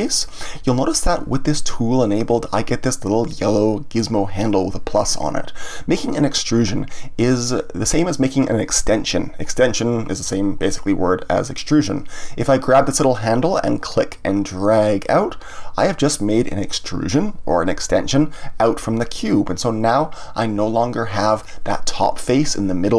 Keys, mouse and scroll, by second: 13.9-16.9 drag, 20.3-22.9 middle drag.